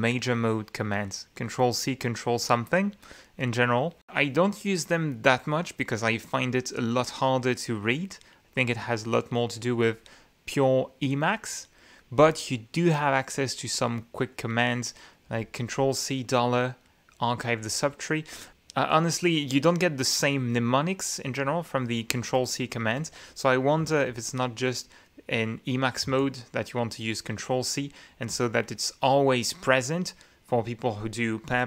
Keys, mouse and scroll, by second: 18.8 Escape, 23.9 q, 24.7 j, 25.0 ctrl+z, 26.9 ctrl+c.